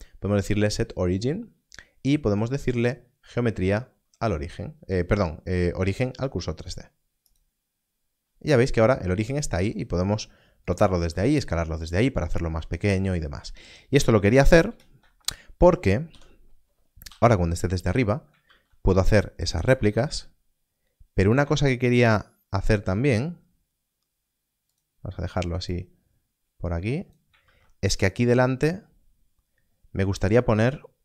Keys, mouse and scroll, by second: 7.2 click, 9.4 click, 10.6 right click, 10.9 s, 11.8 right click, 12.1-12.4 scroll down 1, 14.6 ctrl+space, 17.0 n, 17.0 KP_7, 18.5 shift+d, 19.5 click, 19.7 shift+d, 21.3 click, 21.5 shift+d, 24.6 shift+d, 27.4 shift+d.